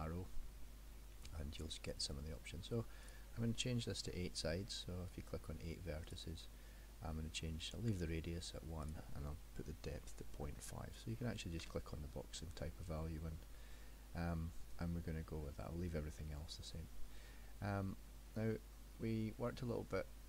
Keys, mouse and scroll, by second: 3.1 click, 8.8 click, 17.8-18.5 scroll up 4, 18.5 middle click.